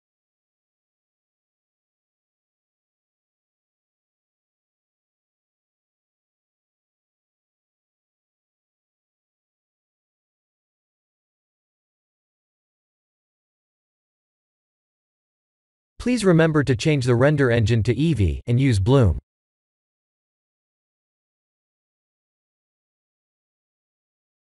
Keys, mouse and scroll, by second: 1.9 click, 3.1 click, 7.0-7.7 scroll up 11, 7.7 shift+middle click, 14.9 click, 17.1 click, 22.4 click, 23.3 click.